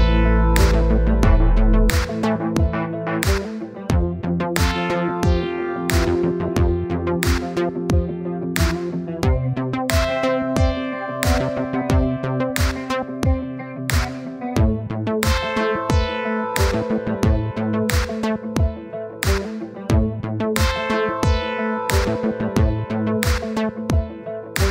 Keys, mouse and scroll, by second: 2.1-3.7 scroll down 7, 3.8-5.0 drag, 6.8-7.2 scroll down 2, 8.0 scroll up 1, 9.4-10.3 scroll down 3, 10.8-13.2 middle drag, 13.2-13.6 scroll up 5, 16.0-16.8 scroll down 5, 16.8-18.0 middle drag, 19.5 middle click, 20.0-20.5 scroll up 2, 20.8-22.7 scroll up 3, 23.5-24.0 scroll down 4, 24.6-24.7 scroll up 14.